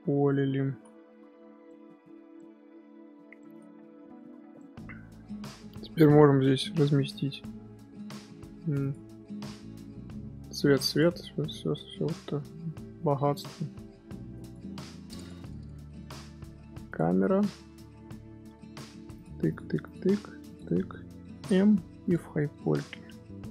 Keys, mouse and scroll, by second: 0.3-0.6 middle drag, 0.6 z, 1.6-2.0 middle drag, 2.0 z, 2.3 scroll down 1, 2.3-3.3 middle drag, 3.3 scroll up 1, 3.4-3.7 shift+middle drag, 3.7 z, 4.5-6.0 middle drag, 6.0 scroll up 2, 6.4 scroll down 1, 6.5 scroll up 2, 8.8 click, 10.8 click, 13.3 click, 14.3 click, 15.1 click, 16.1 scroll down 1, 16.2 scroll up 1, 16.4 scroll down 1, 16.4 scroll up 1, 16.8 click, 17.3 scroll down 1, 17.3 scroll up 1, 19.1 ctrl+click, 19.4 ctrl+click, 19.8 ctrl+click, 20.4 ctrl+click, 21.4 m, 22.4-23.5 scroll up 2.